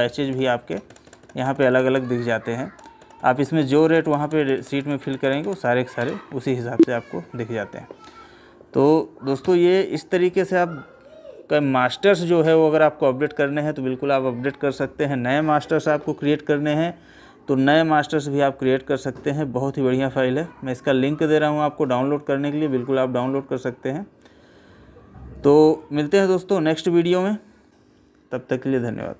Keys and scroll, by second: 11.6 Escape.